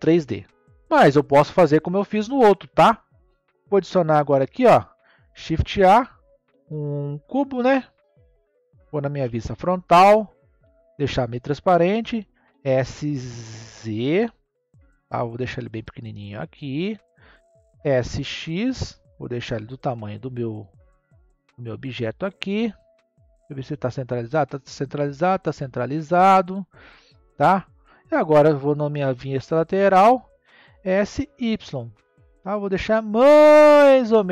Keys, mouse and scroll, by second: 3.9 click, 5.4 shift+a, 9.1 KP_1, 10.6 click, 12.2 s, 17.7 s, 22.4-23.4 scroll up 1, 23.4 click, 24.8 click, 28.8 KP_3, 30.7 s, 33.4-34.3 drag.